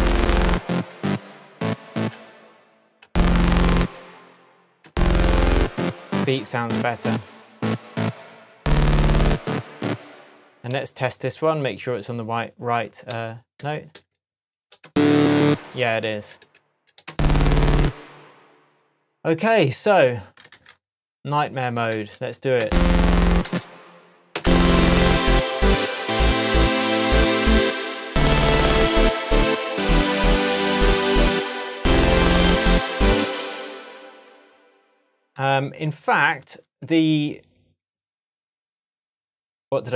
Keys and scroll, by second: 2.0 space, 4.8 space, 10.0 space, 13.6 shift+Up, 14.8 shift+space, 16.2 shift+Down, 17.1 shift+space, 20.5 super+c, 21.9 super+v, 22.6 super+space, 23.3 space, 33.2 space, 37.8 super+d.